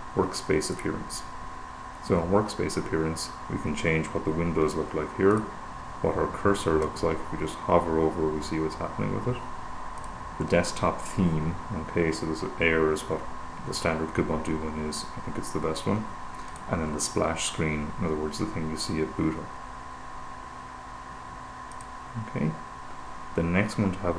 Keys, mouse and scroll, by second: 1.0 click, 4.4-5.0 scroll down 2, 5.0-5.5 scroll up 1, 5.7 click, 10.4 click, 16.9 click, 22.0 click.